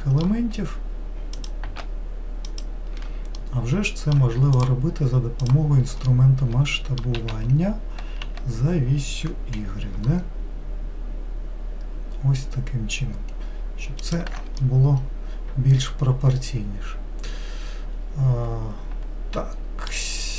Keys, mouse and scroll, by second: 1.4 click, 2.5 shift+click, 3.4-4.6 middle drag, 4.6 shift+click, 5.4 shift+click, 6.1-7.2 shift+middle drag, 7.2 s, 14.6-17.7 middle drag.